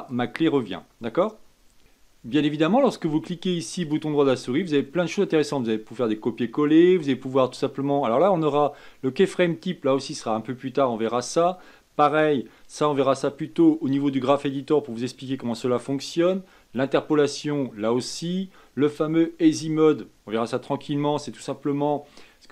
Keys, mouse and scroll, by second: 0.3-1.8 drag, 4.1-7.2 right drag.